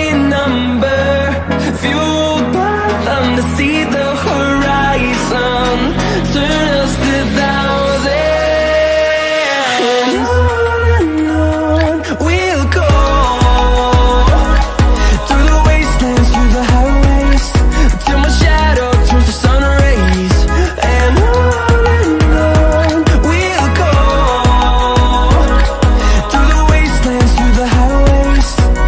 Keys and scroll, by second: 9.2 ctrl+d, 12.2 ctrl+z, 14.5 Delete, 15.1 ctrl+d, 20.8 ctrl+d, 24.9 ctrl+d.